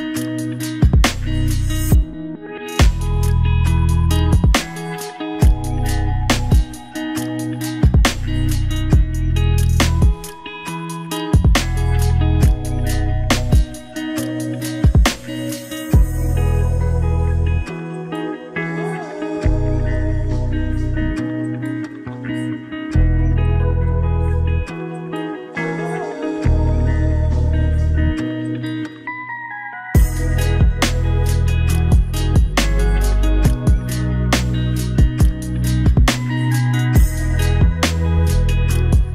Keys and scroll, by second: 0.5 ctrl+d, 26.2 ctrl+v, 30.9 ctrl+d.